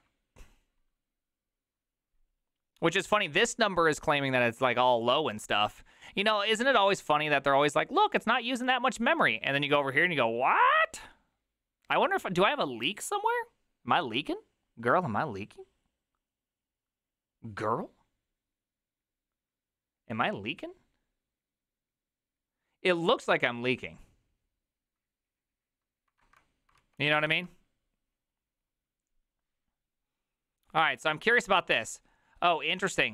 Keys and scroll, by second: 26.8 alt+{, 27.3 alt+[.